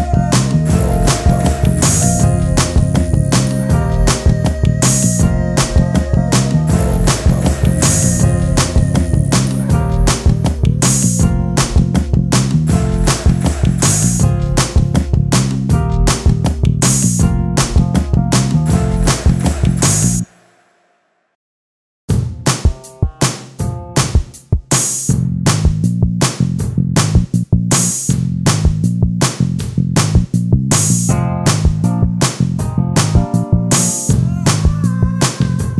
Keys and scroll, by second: 3.1 ctrl+space, 3.3 e, 7.8 ctrl+space, 9.7 ctrl+space, 11.9 space, 16.2 ctrl+space, 20.4 ctrl+space, 35.0 ctrl+space.